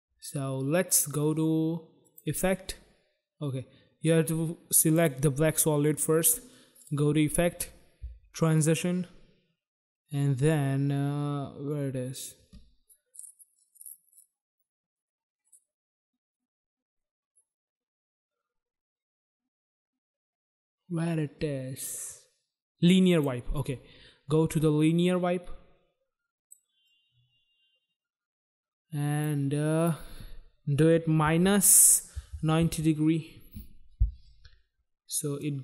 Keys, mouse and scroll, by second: 2.0 click, 4.8 click, 6.8 click, 23.1 click, 24.9 click, 26.8 click, 29.8 click, 30.4 click, 31.2-32.6 typing, 35.4 click.